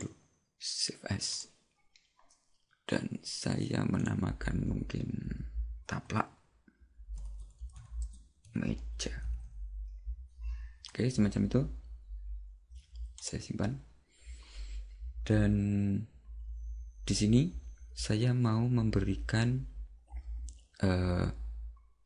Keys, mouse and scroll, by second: 13.5 click.